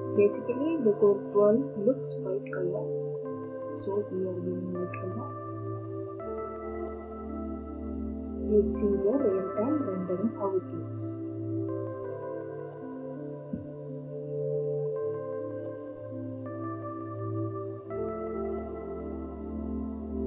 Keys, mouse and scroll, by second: 3.3 click, 7.4 scroll, 9.5 click, 11.3 scroll, 11.3 click, 12.3 scroll.